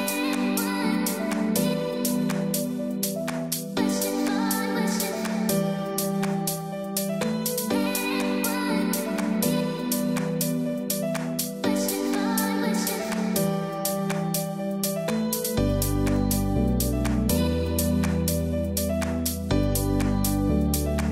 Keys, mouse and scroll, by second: 2.2 scroll down 1, 3.3-3.7 scroll up 1, 4.9-5.5 scroll down 1, 5.7 ctrl+shift+a, 10.3 click, 10.6 space, 10.7 click, 11.4 space, 11.5-16.9 drag, 16.9-21.1 drag.